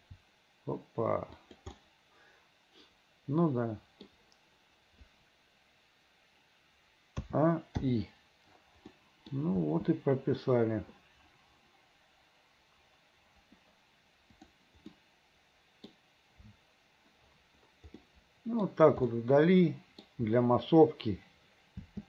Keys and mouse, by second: 0.1 g, 1.9-4.2 drag, 7.3 a, 7.9 i, 9.0 middle click, 9.7 space, 14.5 click, 15.0 middle click, 18.1 middle click, 19.2 middle click, 21.9 space.